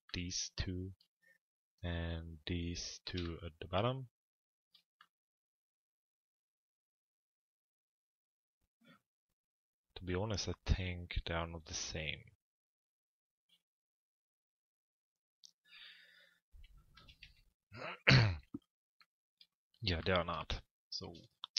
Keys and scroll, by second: 16.6 f, 17.2 z.